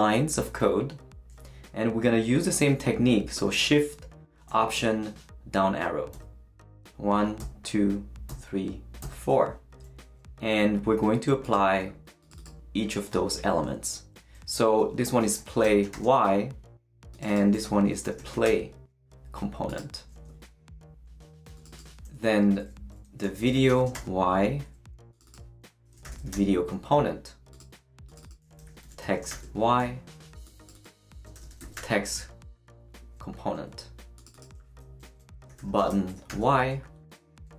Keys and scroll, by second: 6.1 alt+shift+Down, 7.4 alt+shift+Down, 15.0-16.1 typing, 17.8-18.9 typing, 23.0-24.4 typing, 25.6-26.8 typing, 28.4-29.8 typing, 31.1-32.1 typing, 35.1-36.8 typing.